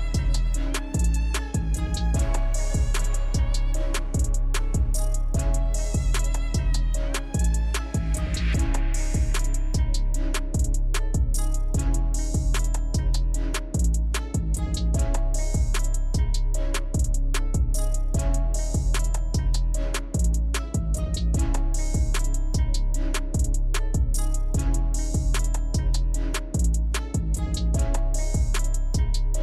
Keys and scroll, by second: 25.7 ctrl+z.